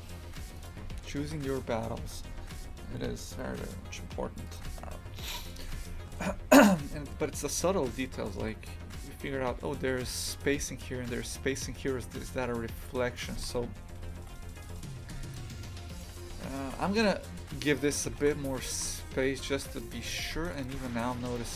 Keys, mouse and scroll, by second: 0.6 click, 0.8 shift+f, 4.6 click, 5.5 click, 6.9-11.6 shift+middle drag, 11.6 scroll up 1, 13.2 click, 13.3 shift+f, 15.9 right click, 16.1 Tab, 16.6 shift+f, 18.1 shift+f, 21.2 right click, 21.4 shift+f.